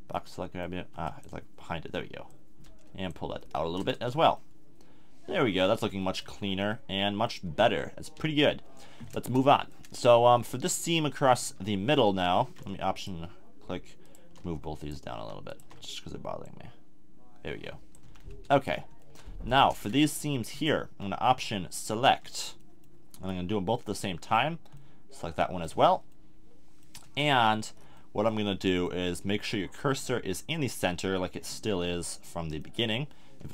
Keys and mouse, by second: 0.1 click, 1.0 b, 3.4 click, 3.6 a, 3.8 Tab, 6.5-6.8 middle drag, 7.4 KP_3, 8.1 KP_1, 9.0-9.5 middle drag, 11.4 Tab, 16.4-17.9 middle drag, 17.9 click, 18.0 a, 18.3 Tab, 19.5 Tab, 20.5 click, 23.8-25.7 middle drag.